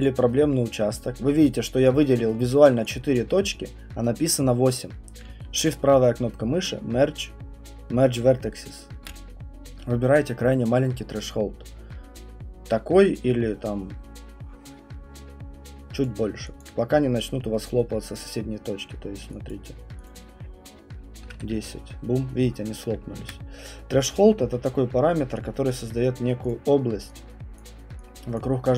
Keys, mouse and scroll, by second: 0.0 click, 1.9 alt+click, 2.3 alt+middle click, 2.6 alt+middle click, 3.1 alt+click, 16.0 click, 16.6 alt+click, 17.6 click, 19.5 click, 20.1 click, 20.9-21.8 typing, 23.2 ctrl+z, 24.5-28.3 Print, 25.7 click, 26.5 click, 27.5 click, 28.3 click, 28.3 click.